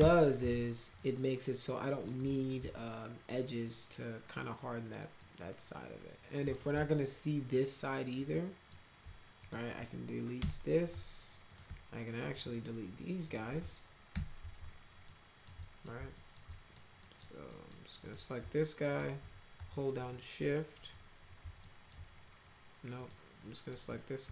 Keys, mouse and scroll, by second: 0.9-2.0 alt+middle drag, 2.2 middle click, 2.7-4.9 alt+middle drag, 5.1-6.3 alt+middle drag, 6.5 alt+middle click, 6.9-8.1 alt+middle drag, 8.3 alt+middle click, 9.3 click, 10.3 Delete, 11.4 click, 12.2 ctrl+click, 13.2 ctrl+click, 14.1 Delete, 15.0 alt+middle click, 15.6 middle drag, 16.1 alt+middle click, 16.4 middle click, 16.9 middle click, 17.4 middle click, 18.0 click, 18.9 shift+click, 21.6 alt+middle click, 22.9 click, 23.6 middle click.